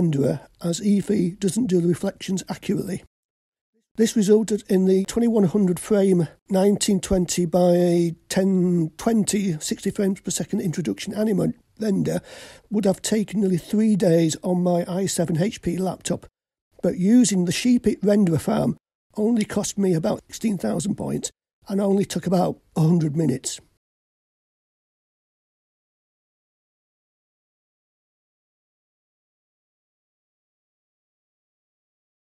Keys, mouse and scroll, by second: 3.7 click, 7.7-11.9 drag, 10.8 KP_9, 16.9-18.6 drag, 24.3-30.0 drag, 30.5 click.